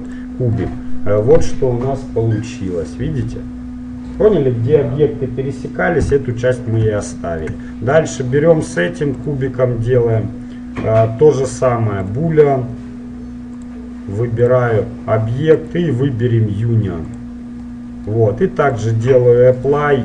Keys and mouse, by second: 0.8-5.1 middle drag, 1.6 z, 7.2-9.3 middle drag, 8.1-9.9 right drag, 9.3-11.2 drag, 9.9-10.9 middle drag, 13.7-15.6 drag, 15.8-17.6 drag, 17.8-18.9 middle drag, 18.9 click, 19.8 right click.